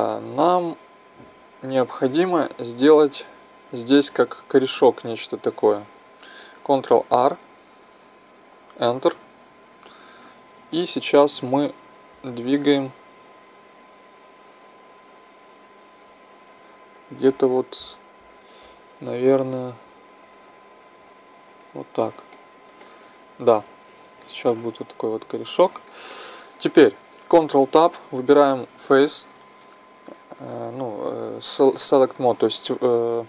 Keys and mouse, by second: 7.1 ctrl+r, 10.7-22.3 drag, 22.3-24.8 middle drag, 26.1 middle click, 27.6 ctrl+Tab.